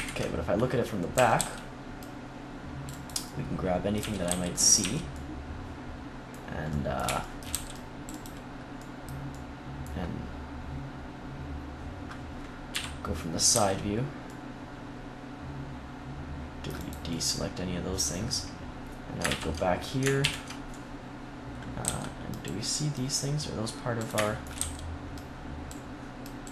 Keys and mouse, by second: 1.0 a, 1.2 c, 3.9 z, 4.2 c, 4.7-7.0 drag, 4.7 z, 7.4 c, 8.2-10.5 drag, 12.6 KP_3, 13.4 c, 16.9 right click, 17.6-18.8 drag, 19.1 ctrl+KP_3, 20.1 ctrl+KP_1, 21.7 c, 24.5 c.